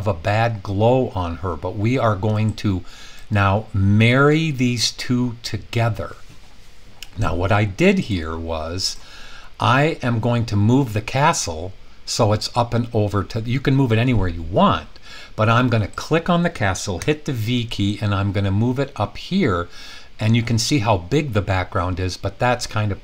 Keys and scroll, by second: 17.0 v.